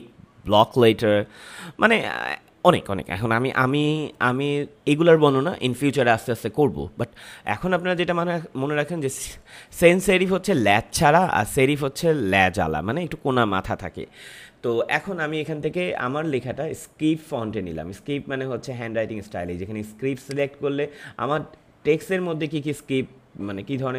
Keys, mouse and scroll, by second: 20.2 click.